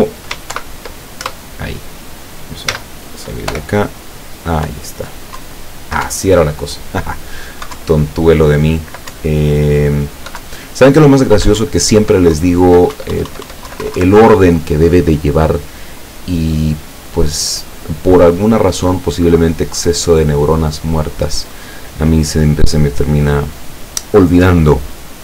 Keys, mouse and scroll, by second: 0.6 ctrl+shift+p, 1.3 ctrl+Return, 2.8 z, 3.5 p, 4.8 Up, 5.4 Down, 6.1 Up, 7.8 Down, 9.2 Up, 10.5 Down, 11.7 Up, 12.4 Down, 13.0 Up, 13.7 Down.